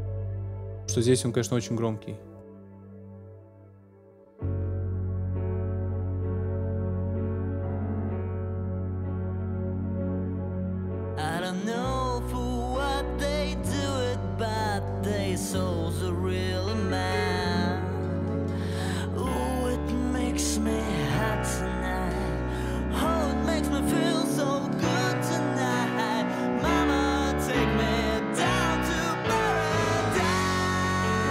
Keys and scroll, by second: 24.5 super+s.